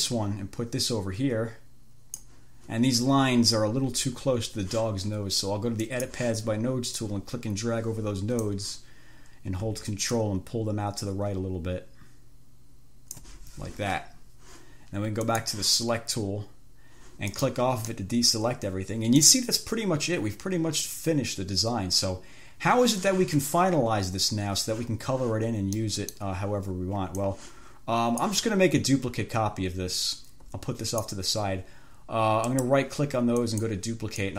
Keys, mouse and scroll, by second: 6.1-6.5 scroll up 1, 7.3-8.9 scroll up 1, 10.3-13.7 ctrl+scroll up 1, 15.5 click, 17.7 click, 18.2-19.7 drag, 26.0 click, 26.4 middle click, 27.4-28.7 drag, 29.2-31.5 drag, 32.7 right click, 33.7 click.